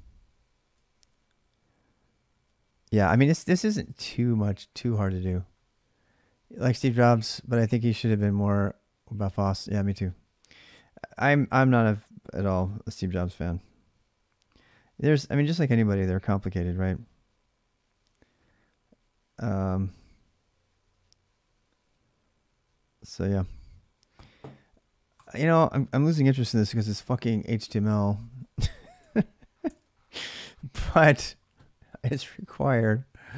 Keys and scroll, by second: 3.3-4.4 typing, 26.3-29.9 typing, 33.1 alt+Tab.